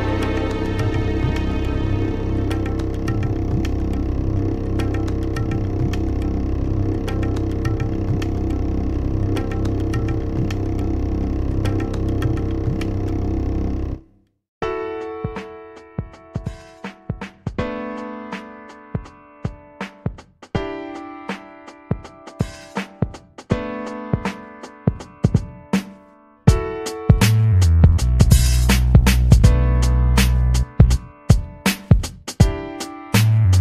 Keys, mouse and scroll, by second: 2.2 click, 3.6 shift+Return, 4.6 BackSpace, 6.3 click, 7.5 Left, 8.0 shift+Return, 9.2 BackSpace, 14.1 click, 16.5 click, 17.6 shift+Return, 21.8 click, 23.2-25.2 drag, 25.9-27.4 drag, 28.2 ctrl+z, 29.8 ctrl+z, 32.6 ctrl+z, 33.5 ctrl+z.